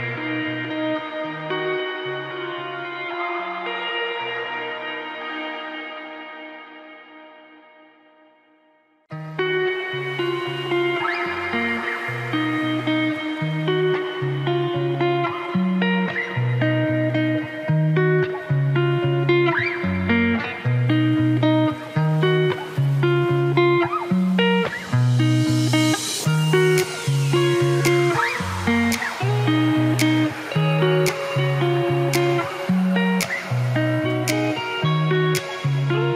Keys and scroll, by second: 18.6 Delete, 22.1 Delete, 24.5 Delete.